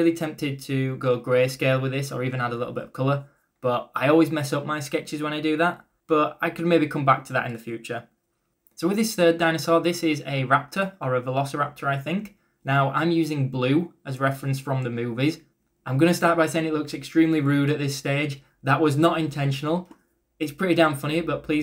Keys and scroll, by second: 0.5-2.9 typing, 0.6 ctrl+z, 2.3 ctrl+z, 5.4 ctrl+z, 8.6 ctrl+z, 9.6 ctrl+z, 9.9 ctrl+z, 13.2 ctrl+z, 13.7 ctrl+z, 14.0 ctrl+z, 15.2-17.2 typing, 17.6 ctrl+z, 19.7 ctrl+z, 20.5 ctrl+z.